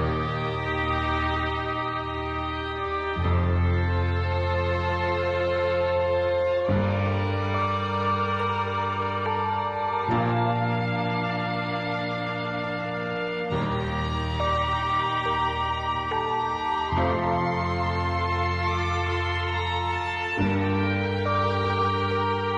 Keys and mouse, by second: 1.3 ctrl+z, 6.5 e, 8.4 click, 9.3 click, 9.6 click, 10.8 click, 11.1 click, 12.1-13.1 drag, 15.0 shift+middle click, 16.7 click, 17.2-18.8 drag, 20.5 click, 21.4 click.